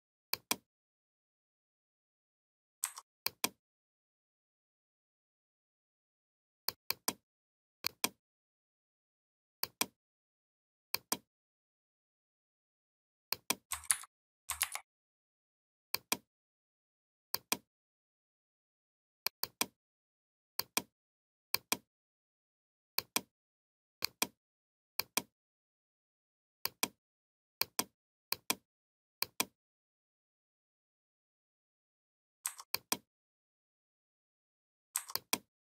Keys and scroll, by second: 13.7 ctrl+c, 14.4 ctrl+f.